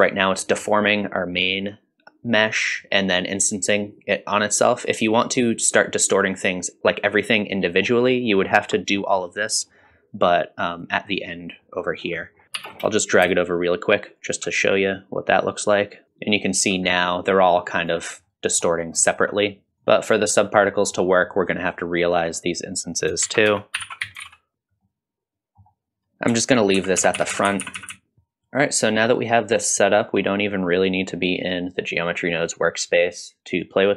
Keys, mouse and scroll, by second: 0.4 middle drag, 1.2 middle drag, 7.8-8.4 scroll down 2, 8.1 middle click, 8.8 middle click, 8.8 scroll down 1, 9.2 middle click, 9.7 middle click, 10.3-10.9 drag, 11.6 middle click, 12.0 scroll down 1, 12.2 middle click, 12.6 ctrl+alt+s, 12.7 alt+click, 13.2 click, 13.4 click, 13.5 click, 13.9 middle click, 13.9 scroll up 2, 14.0 middle click, 14.2 click, 14.4 middle click, 14.6 drag, 15.0 middle click, 15.3 shift+click, 15.7-17.9 drag, 18.3-18.6 middle drag, 18.8 scroll up 1, 19.0 shift+middle click, 19.7 m, 19.8 click, 20.7 middle click, 21.7-22.1 drag, 22.3 click, 23.2 shift+a, 24.8 middle click, 26.0-26.4 scroll up 3, 26.3 middle click, 26.8 ctrl+z, 27.0 ctrl+z, 27.2 ctrl+z, 27.3 ctrl+z, 27.6 ctrl+z, 27.8 ctrl+z, 27.9 ctrl+z, 28.1 ctrl+s.